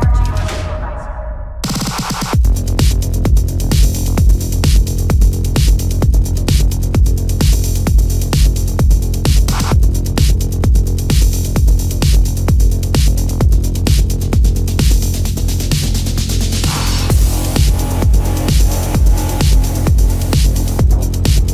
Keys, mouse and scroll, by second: 10.0 ctrl+alt+z, 12.4 ctrl+alt+z, 17.6 ctrl+alt+z.